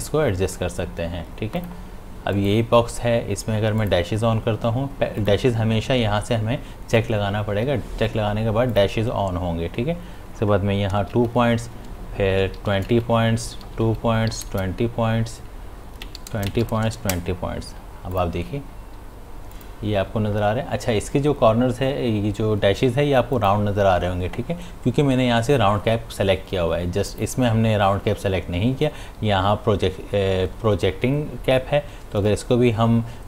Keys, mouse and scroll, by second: 1.6 click, 8.7 click, 11.2 Tab, 16.0 Tab, 18.1 click, 23.3 click, 27.1 click.